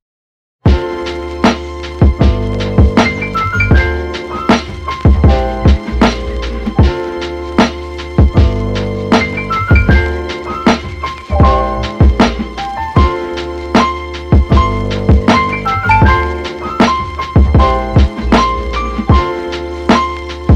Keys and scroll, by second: 3.3 space.